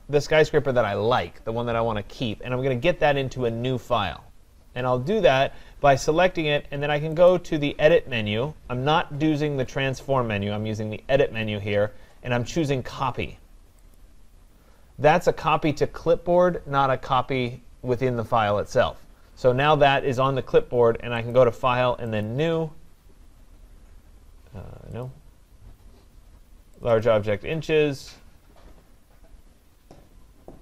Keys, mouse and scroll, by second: 7.5-12.4 drag, 14.0-19.0 drag, 21.3 click, 22.2 click, 25.0 click, 26.9 click, 27.1 click.